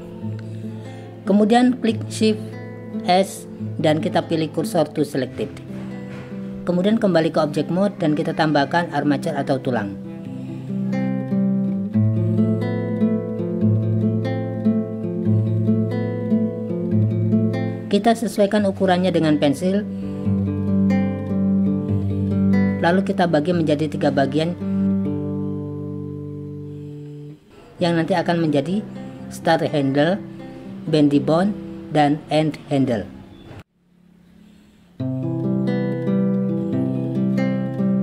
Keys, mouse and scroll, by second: 1.9 shift+s, 8.0 click, 10.5 click, 12.3-14.4 drag, 15.2 click, 16.0 click, 16.9 click, 19.0 click, 20.5 click, 21.0 g, 22.8 e, 23.6 z, 25.3 click, 26.0 click, 26.5 click, 37.8 g.